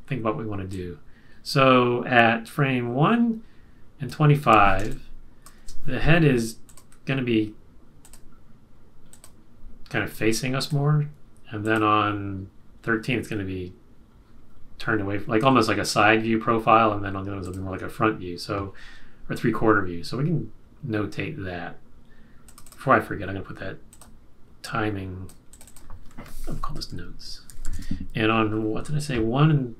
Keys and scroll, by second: 4.8 space, 26.5-28.1 typing.